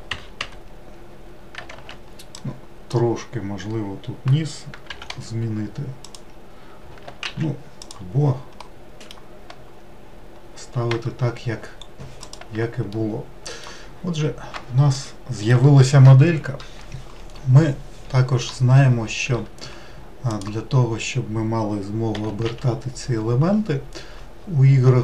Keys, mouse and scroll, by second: 1.4 alt+z, 2.7 click, 4.6 g, 7.0 alt+z, 7.7 click, 8.5 middle click, 9.2-10.0 scroll down 1, 10.0-10.7 scroll down 1, 10.7 Tab, 11.5-12.1 scroll up 1, 12.1 click, 12.7-20.1 middle drag, 20.1 click, 21.9 r.